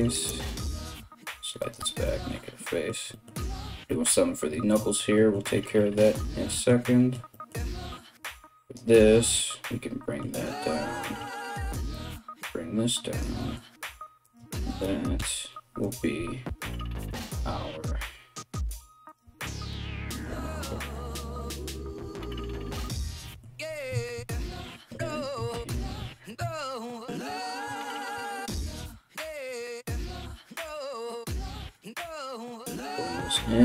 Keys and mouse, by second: 0.2 g, 1.4 f, 7.7-16.4 ctrl+drag, 13.8-25.5 shift+middle drag, 13.8 right click, 14.1 shift+right click, 14.7 f, 15.4 right click, 16.0 g, 16.7 right click, 16.8 g, 18.6 right click, 18.8 g, 19.7 right click, 19.8 g, 21.5 g, 23.7-33.6 drag, 30.7 right click, 31.0 shift+right click, 31.6 f, 33.2-33.6 middle drag, 33.2 right click.